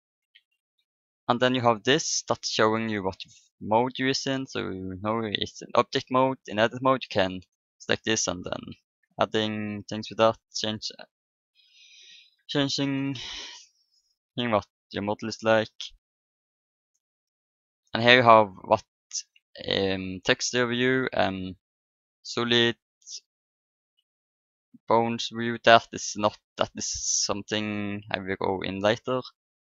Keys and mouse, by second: 0.3 n, 7.7-8.8 drag, 8.8 right click, 10.0 click, 11.1 click, 12.1 middle click, 17.9-19.9 drag, 21.1 click, 22.3-25.4 drag, 27.0-28.7 drag, 28.7 middle click.